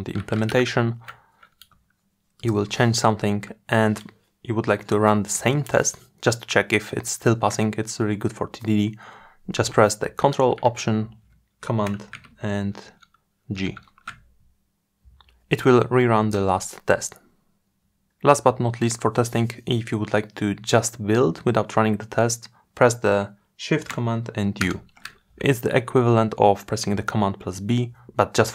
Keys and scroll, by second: 9.8 ctrl+alt+super+g, 23.5 shift+super+u.